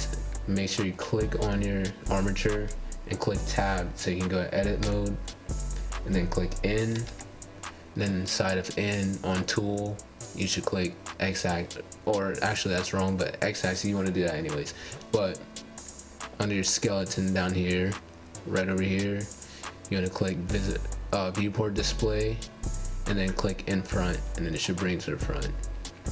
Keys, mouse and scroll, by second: 4.2-5.1 middle drag, 5.1 Tab, 6.9 click, 7.8 Tab, 7.8 click, 10.3 Tab, 10.5 click, 12.4 click, 15.7 click, 19.7-22.1 drag, 23.8 click, 24.6 scroll up 1, 24.7-26.0 middle drag, 26.0-26.1 scroll down 1.